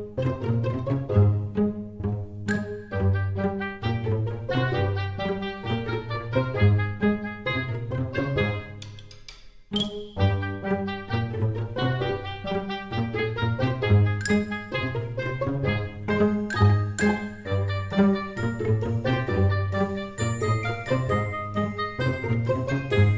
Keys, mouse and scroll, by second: 8.7 click, 10.0-10.5 scroll up 3, 10.5 middle click, 18.0-18.6 scroll down 1, 18.6-20.3 scroll down 1, 20.3 middle click.